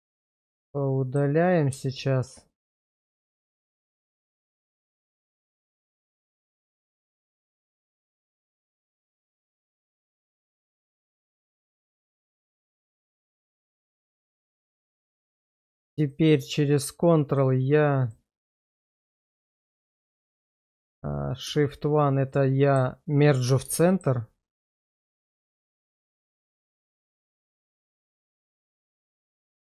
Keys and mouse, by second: 0.0 middle click, 0.3 middle click, 1.9 click, 3.5 middle click, 5.5-6.6 middle drag, 8.5 shift+middle click, 10.2 middle click, 11.5 x, 12.7 middle click, 13.2 middle click, 21.5 shift+1, 22.3 middle click, 23.8 shift+middle click.